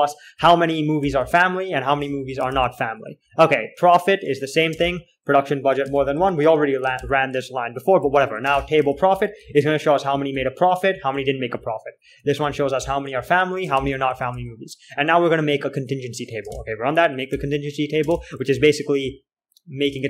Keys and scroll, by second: 0.0-2.3 typing, 2.8 ctrl+h, 3.6 typing, 5.3-7.3 typing, 7.3 ctrl+h, 8.5-14.9 typing, 14.1 ctrl+h, 16.8 space, 18.4-20.0 typing.